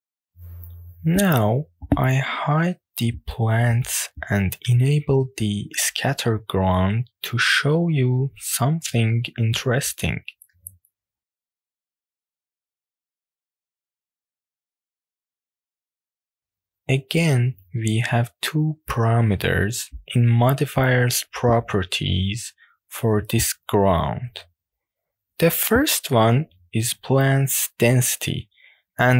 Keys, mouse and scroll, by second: 0.0 click, 1.9 click, 2.3 click, 2.8-3.1 scroll down 2, 3.4 shift+middle click, 5.4 drag, 5.9 click, 6.3-7.1 scroll down 4, 7.2-7.8 shift+middle drag, 8.8 click, 9.3 scroll down 1, 9.5-9.8 shift+middle drag, 10.0-10.8 middle drag, 10.9 scroll up 1, 11.6 middle click, 13.3-13.6 shift+middle drag, 13.8-14.5 middle drag, 14.6-14.9 shift+middle drag, 15.1-16.4 middle drag, 16.5 click, 18.2 drag, 19.4 drag, 20.2-20.8 shift+middle drag.